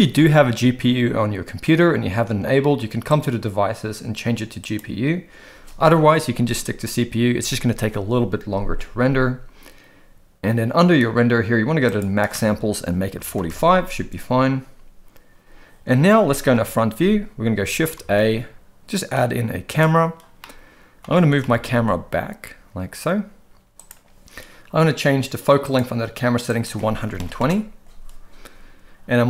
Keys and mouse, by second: 3.2-4.7 drag, 11.9-13.5 drag, 16.5 KP_1, 18.0 shift+a, 20.4-21.0 middle drag, 21.4 g, 25.7 click, 26.5 click.